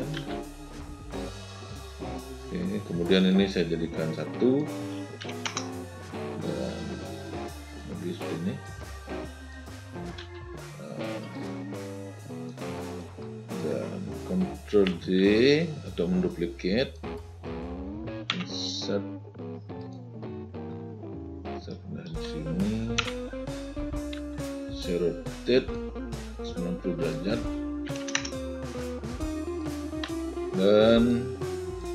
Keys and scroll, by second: 0.2 r, 5.3 1, 5.5 Return, 10.3 w, 20.8 v, 27.9 9, 28.0 0.